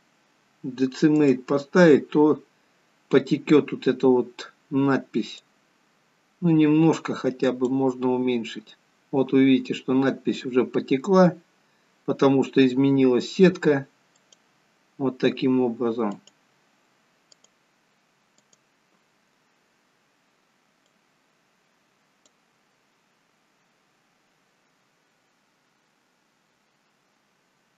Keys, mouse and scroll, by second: 5.9 click, 14.3 click, 16.2 click, 17.4 click, 18.4 click, 20.8 click.